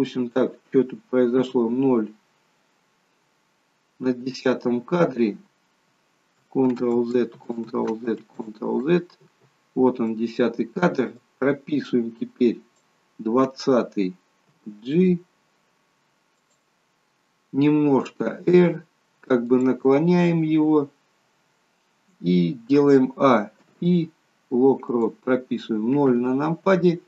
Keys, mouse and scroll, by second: 1.4 KP_0, 7.2 ctrl+z, 7.8 ctrl+z, 8.5 ctrl+z, 11.4 click, 14.5 g, 17.8 r, 23.4 a, 23.6 i, 26.1 KP_0.